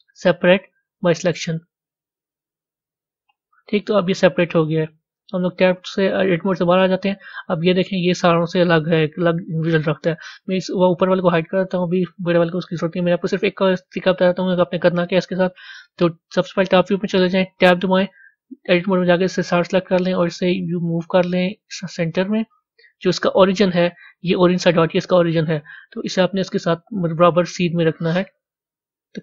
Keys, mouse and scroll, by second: 7.4 click, 11.3 click, 14.1 click.